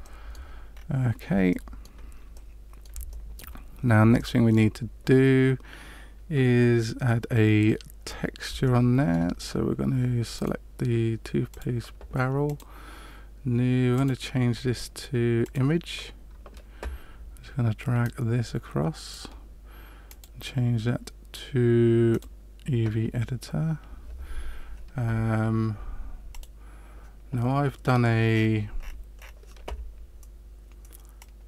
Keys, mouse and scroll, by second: 0.0 shift+middle click, 0.7-1.1 scroll down 2, 1.4 shift+middle click, 2.3 middle click, 3.2 shift+middle click, 4.1 shift+middle click, 8.0-8.4 scroll down 3, 8.6 shift+middle click, 10.3 right click, 11.5 click, 12.4 click, 13.9 click, 18.0 click, 20.0 click, 26.3 click.